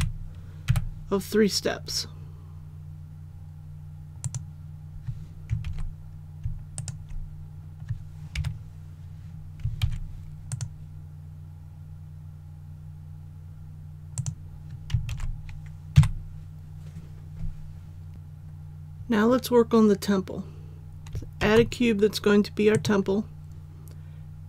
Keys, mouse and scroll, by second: 0.6 e, 4.2 click, 5.6 alt+a, 6.7 alt+right click, 8.3 KP_7, 9.8 alt+e, 10.5 click, 15.1 alt+a, 15.9 KP_1, 18.1 click, 21.3 shift+a, 22.7-24.4 drag.